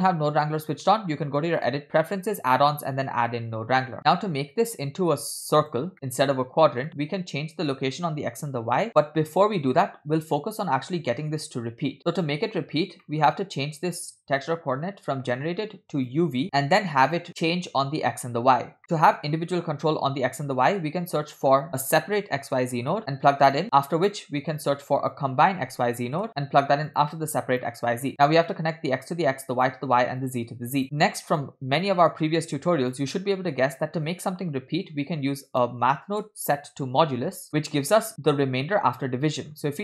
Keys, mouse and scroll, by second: 1.6-3.2 drag, 4.0-5.8 drag, 5.9 middle click, 6.9 middle click, 7.2-7.5 scroll up 2, 12.0 click, 12.0 scroll down 1, 12.9-13.4 scroll up 3, 13.1 middle click, 16.1-16.4 drag, 16.4 middle click, 16.4 scroll down 2, 18.9 middle click, 20.6 shift+a, 22.1 s, 23.5-24.2 drag, 24.6 shift+a, 27.6-28.4 drag, 29.1-29.9 drag, 30.3-31.4 drag, 30.9 middle click, 30.9 scroll down 2, 31.8-33.0 drag, 33.5 scroll up 2, 35.0 shift+a, 39.7 scroll up 2.